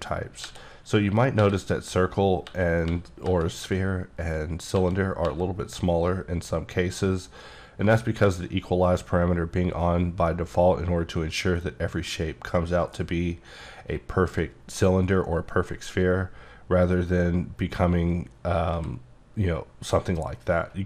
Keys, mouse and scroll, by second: 0.4-1.4 typing, 2.5-3.3 typing, 4.7 e, 5.2 e, 10.3-13.1 middle drag, 16.4-16.8 scroll down 2, 16.8-18.7 scroll up 1, 18.7 e.